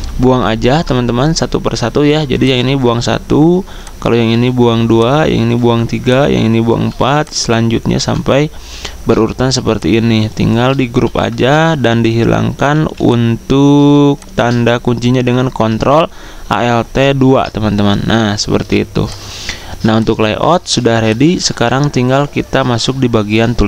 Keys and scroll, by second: 2.6 Delete, 4.5 Delete, 11.0 ctrl+g, 12.8 z, 15.3 typing, 17.1 ctrl+alt+2, 18.6 typing, 19.6 z.